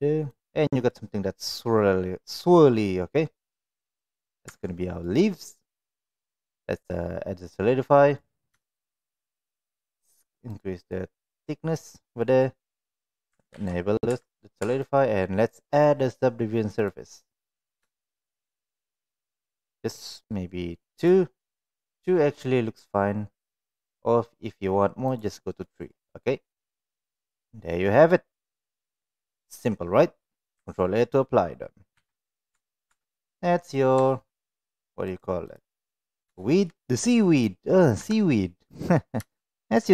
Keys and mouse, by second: 0.8-3.8 middle drag, 4.4 Tab, 4.8 middle click, 6.3-7.4 drag, 7.8 middle click, 8.6 shift+middle click, 10.5 click, 11.2-11.7 middle drag, 12.2 middle click, 13.5 ctrl+a, 14.0 Tab, 14.6 Tab, 15.7-16.8 drag, 17.2-17.5 middle drag, 17.9 shift+middle drag, 20.9 drag, 21.7 middle click, 25.6 middle click, 31.9 ctrl+a, 32.5 Tab, 32.8 Tab, 33.2 click, 34.1 shift+middle click, 35.2 right click, 36.3 shift+middle click, 38.0 KP_1, 39.2-39.5 shift+middle drag.